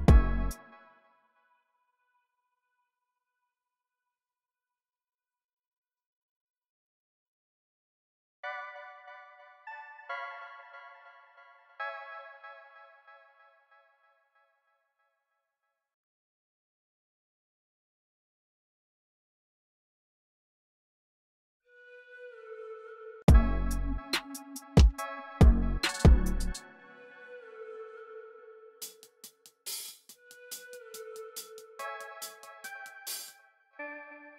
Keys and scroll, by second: 0.1 super+z, 6.8 super+r, 9.6 super+a, 10.3-11.6 typing, 12.4 alt+super+s, 14.3 y, 15.0 y, 18.2 super+z, 22.8 space, 32.7 e, 32.9 space, 33.3 super+a, 33.6 alt+shift+Page_Down, 34.0 typing.